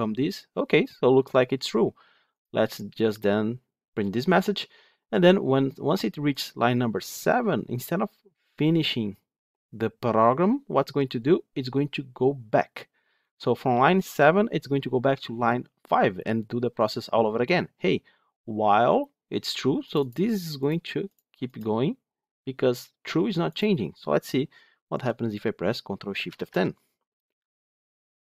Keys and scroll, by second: 2.4 ctrl+F8, 26.2 ctrl+shift+F10.